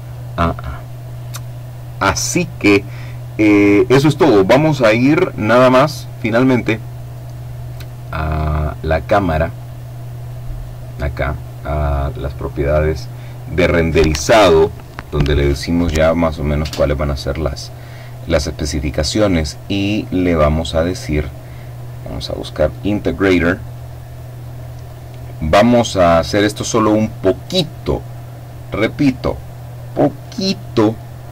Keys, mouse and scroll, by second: 5.9 click, 6.4 middle click, 7.5 middle click, 8.8 click, 18.4-19.4 scroll down 2, 22.4 click, 22.8-23.5 scroll down 1, 23.5-24.0 scroll down 1, 24.3 click.